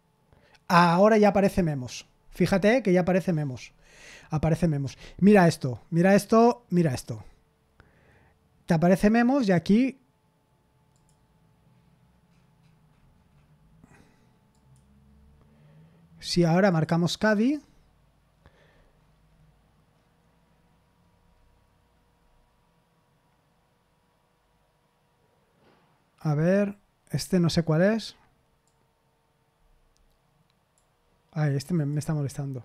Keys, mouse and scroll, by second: 1.4 click, 3.9-4.3 scroll down 1, 6.7 click, 10.9 click, 12.2-12.9 scroll down 1, 12.9-13.8 scroll up 1, 14.5 click, 16.6 click, 17.0 click, 18.6-21.1 scroll up 1, 21.1-21.9 scroll down 1, 21.9-22.8 scroll down 1, 28.6-30.8 drag, 31.7 click.